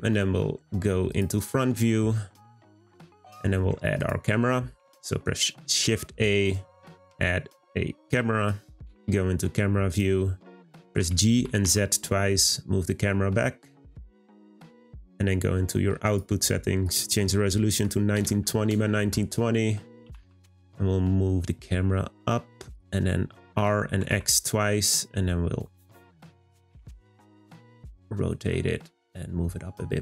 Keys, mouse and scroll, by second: 1.7-2.2 scroll up 2, 2.9-4.0 shift+middle drag, 4.0 click, 4.8 shift+a, 11.0 g, 16.1 click, 16.8-19.9 drag.